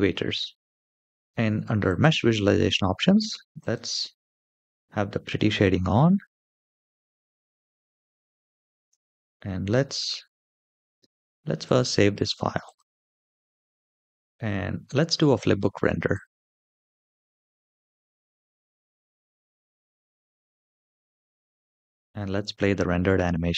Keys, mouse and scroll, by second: 1.6 click, 3.3 click, 5.0-5.5 scroll up 2, 5.7-6.6 shift+middle drag, 7.4 scroll up 1, 7.9-8.5 shift+middle drag, 9.0 scroll down 1, 11.4-12.7 drag, 15.8 click, 20.5-21.9 drag.